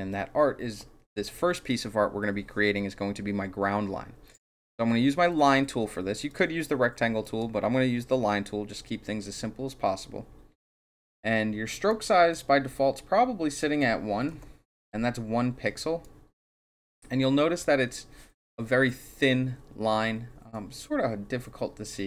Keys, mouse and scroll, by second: 6.3 click, 7.2 click, 11.9 click, 13.5 click, 14.2 KP_1, 16.0-17.6 drag.